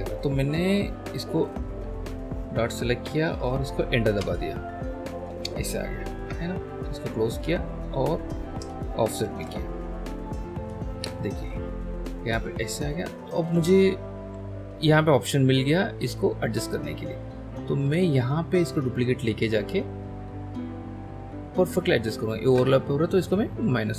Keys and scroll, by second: 4.2 Return, 6.2 BackSpace, 9.3 ctrl+h, 14.3 l.